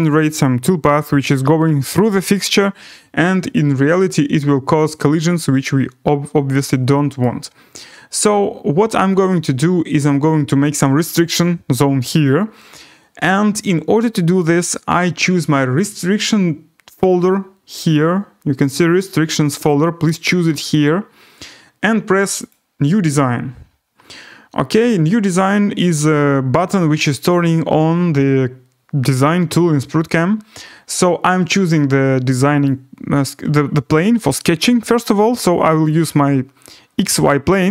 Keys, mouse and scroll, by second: 7.2 right click, 17.9 click, 22.5 click, 32.6 click, 36.0 click.